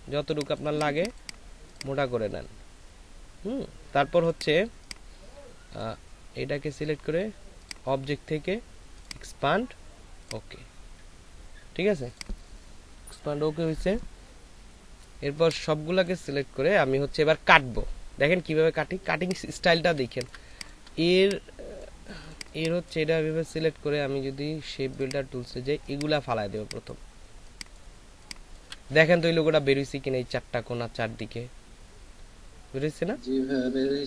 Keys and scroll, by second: 19.0 ctrl+space.